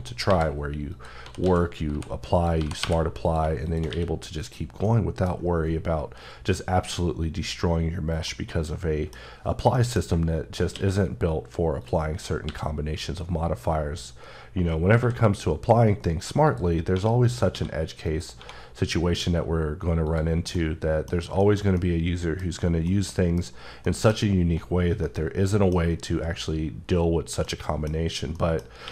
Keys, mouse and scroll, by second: 0.0-2.6 typing, 0.7 click, 2.1 click, 3.0 click, 3.7 q, 4.2 click, 4.6 middle click, 5.5 scroll down 2, 8.0 middle click, 9.0-9.5 scroll up 3, 9.5 middle click, 9.7 middle click, 9.9-10.4 shift+scroll down 1, 10.4 scroll down 1, 10.5 q, 11.6 click, 12.2 x, 14.8 v, 16.2 click, 16.7 1, 17.0 click, 17.3 q, 17.8 click, 18.1 1, 19.8 click, 20.1 scroll down 1, 20.3 middle click, 20.9 scroll down 2, 21.1 shift+middle click, 22.2 scroll down 1, 22.6 middle click, 23.6 middle click, 28.6 q.